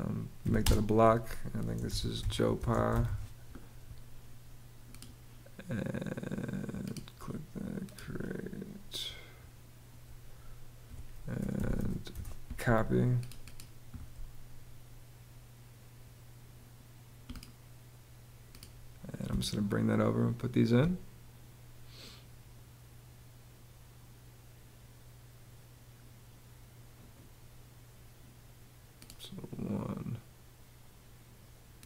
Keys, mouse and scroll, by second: 0.0 b, 0.2 space, 1.3-3.2 typing, 10.9-11.9 typing, 18.9 space.